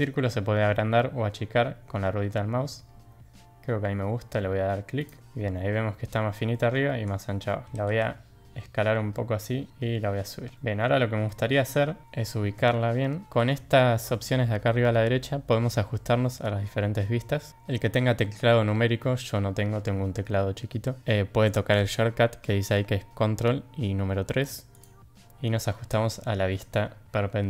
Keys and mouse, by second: 5.2 Tab, 6.5 middle drag, 7.4 middle drag, 7.6 s, 9.7 g, 10.5 middle drag, 11.3 middle click, 14.1 middle drag, 24.8-26.8 drag.